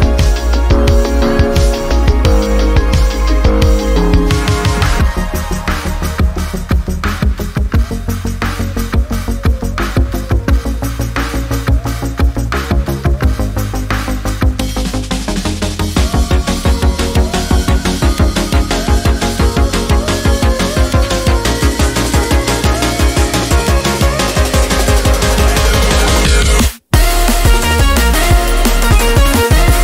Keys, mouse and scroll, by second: 11.8 click, 11.8 typing, 18.2-29.8 drag, 18.2 typing.